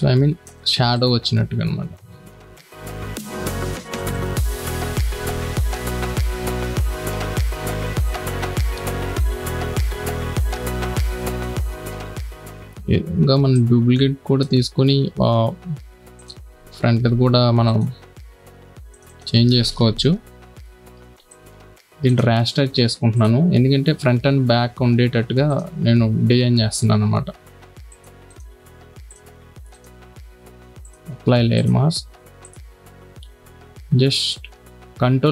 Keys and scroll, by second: 6.1 [, 9.6 v, 10.0 space, 17.0 b, 19.9 ].